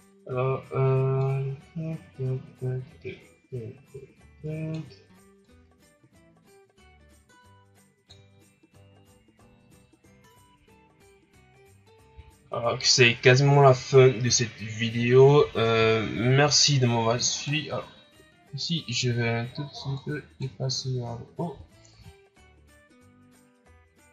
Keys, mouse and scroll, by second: 0.0 scroll down 2, 1.4-4.4 drag, 5.5-8.7 drag, 12.1 a, 17.3 right click, 19.9 click, 21.9 a.